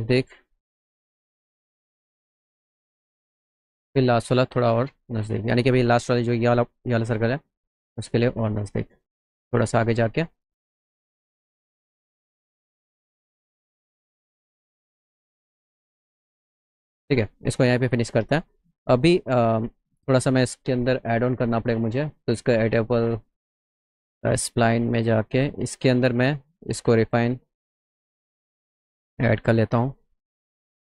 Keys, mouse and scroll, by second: 1.4 click, 10.7 shift+click, 12.7 click, 15.3 click, 16.9 right click, 17.5 middle click, 17.5 scroll up 1, 18.2 middle click, 18.2 scroll up 1, 19.0 middle click, 19.3 middle click, 19.7 middle click, 21.5 click, 22.9 click, 23.9 middle click, 24.7 middle click, 25.4 right click, 26.8 click, 28.4 click, 29.4 click, 30.0 click.